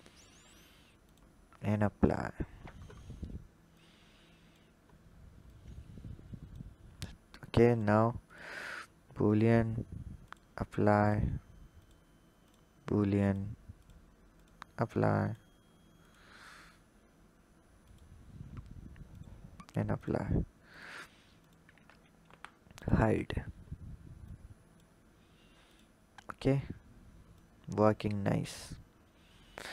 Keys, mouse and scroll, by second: 1.8-2.3 drag, 2.3-3.5 scroll down 10, 3.5 click, 5.3-9.2 drag, 10.8-13.7 drag, 15.0 click, 17.7 click, 19.7 click, 21.2 shift+click, 22.0 h, 22.5 click, 23.1-24.1 scroll down 3, 24.1 click, 25.4 click, 26.2-27.2 scroll up 2, 27.2 click, 28.3-29.4 scroll up 2, 29.4-29.7 drag.